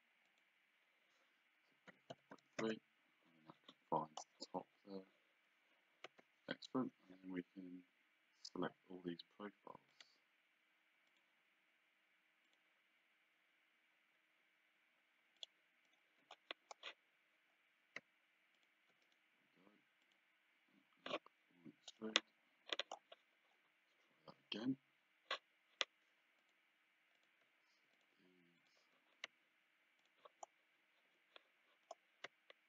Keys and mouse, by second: 0.3 click, 1.9 KP_4, 2.1 KP_Decimal, 2.6 Return, 2.6 KP_Enter, 6.7 Escape, 9.9 click, 11.1 shift+click, 12.5 shift+click, 15.4 shift+click, 18.6 shift+click, 19.1 right click, 20.0 click, 21.9 click, 26.4 click, 28.0 shift+click, 30.0 shift+click.